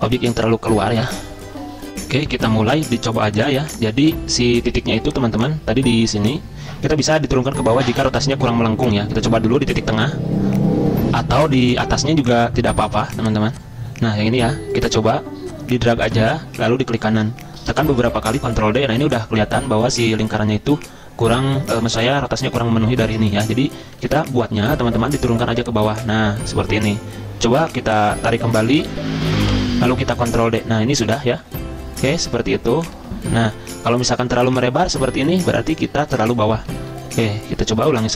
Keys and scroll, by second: 0.3 ctrl+z, 0.4 ctrl+z, 1.6 F10, 1.9 F9, 11.1 F10, 17.9 ctrl+d, 18.2 ctrl+d, 18.3 ctrl+d, 23.2 ctrl+z, 23.6 ctrl+z, 23.8 ctrl+z, 30.1 ctrl+d, 30.4 ctrl+d, 35.5 ctrl+z, 35.6 ctrl+z.